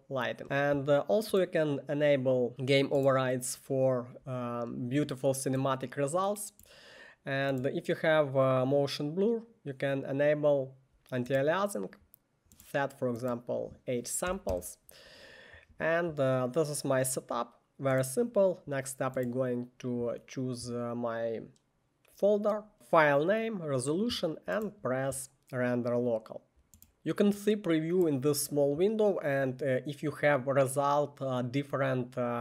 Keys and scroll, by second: 14.2 8, 14.5 Return.